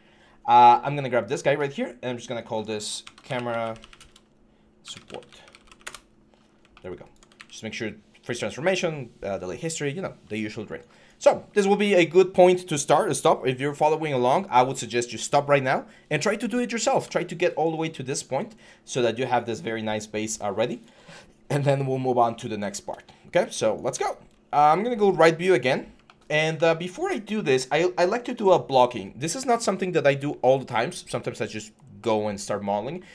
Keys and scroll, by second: 2.9-3.2 typing, 4.9-5.2 typing, 5.6 Return, 7.1 ctrl+a, 8.6 ctrl+a.